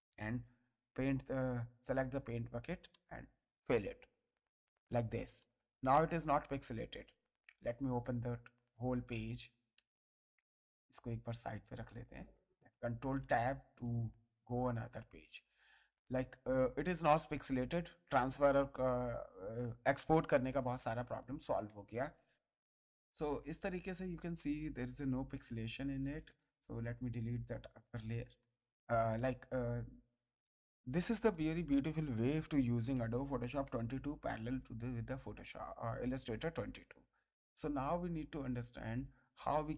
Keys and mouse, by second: 0.4 g, 2.0 alt+click, 2.9 space, 3.2 ctrl+click, 3.6 space, 4.1 click, 5.4 space, 5.5 ctrl+click, 6.3 ctrl+space, 6.4 ctrl+click, 7.6 click, 9.7 space, 11.0 click, 12.7 ctrl+Tab, 13.2 ctrl+space, 13.4 ctrl+click, 14.0 ctrl+space, 14.4 ctrl+click, 15.6 click, 16.3 click, 18.7 ctrl+space, 19.1 click, 22.3 space, 23.5 ctrl+space, 23.7 ctrl+click, 24.7 ctrl+click, 26.2 click, 26.6 Delete, 28.3 space, 29.1 click, 31.9 ctrl+click, 36.0 space, 37.8 ctrl+space.